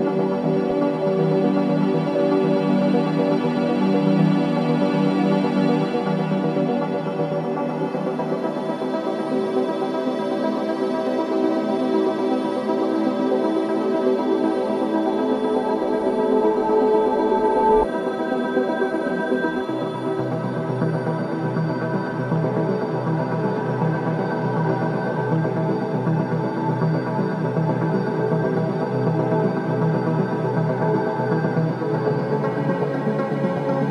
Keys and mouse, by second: 0.8-1.7 drag, 2.8-3.5 typing, 5.0 click, 6.6-8.7 drag, 10.2 click, 11.7-12.5 drag, 12.9-13.2 typing, 14.1-15.0 drag, 17.0-17.4 typing, 18.4-19.3 drag, 19.9 typing, 21.0 typing, 21.8-27.7 drag, 28.1-29.5 drag, 29.6 typing, 30.3 click, 32.4 click, 32.9 typing.